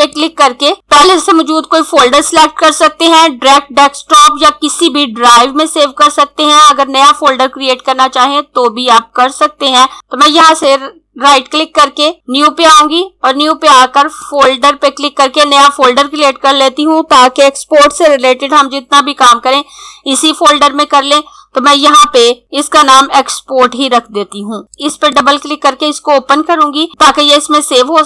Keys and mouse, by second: 9.9 click, 10.4 right click, 14.2 click, 23.5-25.1 typing, 24.7 click.